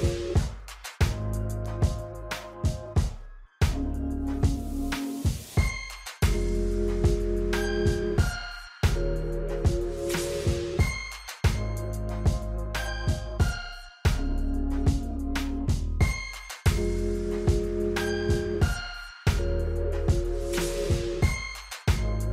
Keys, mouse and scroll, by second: 7.9 alt+scroll up 1, 8.4 space, 8.4 click, 8.7 space, 10.0-11.5 drag, 11.8-12.7 alt+scroll down 3, 13.0 click, 13.4 scroll down 1, 13.8 scroll up 1, 18.2 F9, 18.2 alt+scroll up 1, 18.8 space, 18.9 click, 19.1 space, 20.0 click, 20.0-22.3 drag.